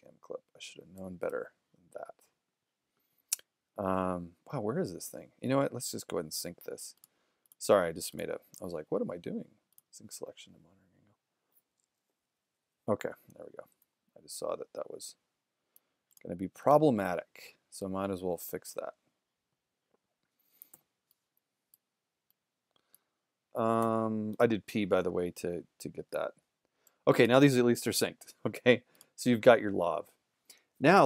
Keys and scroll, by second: 20.7 p, 23.8 a.